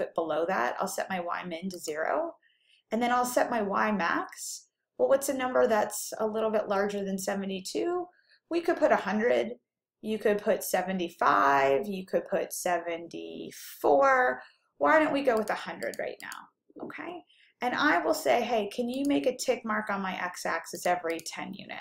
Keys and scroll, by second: 0.1 0, 1.9 Down, 15.6 1, 16.1 0, 16.7 0, 19.1 Down, 20.9 1, 21.6 0.